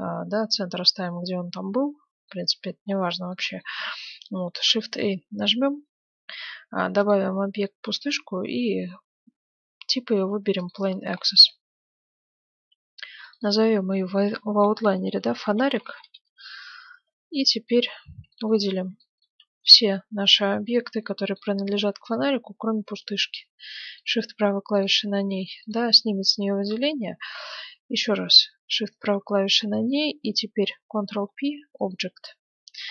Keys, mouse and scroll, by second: 4.8 shift+a, 13.2-15.2 drag, 17.2-17.7 scroll down 1, 17.7-20.7 middle drag, 19.6 a, 20.1 b, 22.2-24.2 middle drag, 23.9-27.3 right drag, 28.9-30.6 right drag, 31.0 ctrl+p.